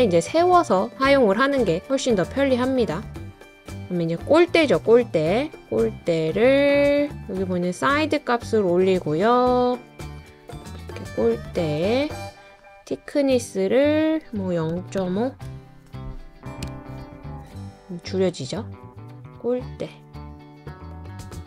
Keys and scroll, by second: 2.0-2.7 typing, 14.5-16.0 typing, 16.6 Return.